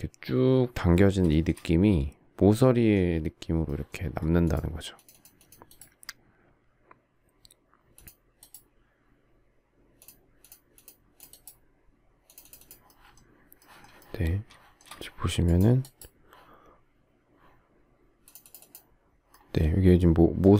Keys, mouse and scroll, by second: 1.3 shift+middle click.